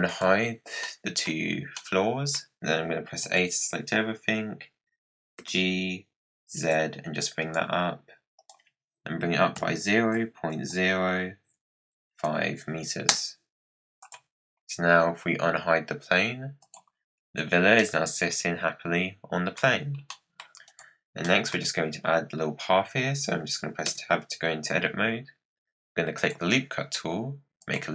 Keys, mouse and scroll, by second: 0.0 click, 0.8 middle click, 1.6 scroll up 1, 1.7-3.2 middle drag, 3.2 a, 5.3 g, 8.3-11.5 drag, 14.0 click, 16.6 click, 17.1-17.7 scroll up 9, 17.7-19.5 middle drag, 19.5-19.9 scroll down 7, 20.0-20.4 middle drag, 20.4 scroll down 1, 20.6 click, 21.0 scroll down 4, 21.2-23.8 middle drag, 23.8 Tab, 26.1-27.9 drag.